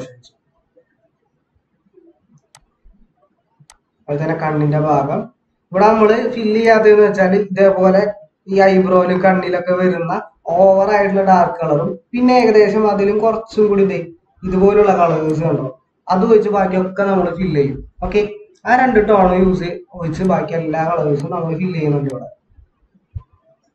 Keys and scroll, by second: 17.7 ctrl+z, 19.2 ctrl+z.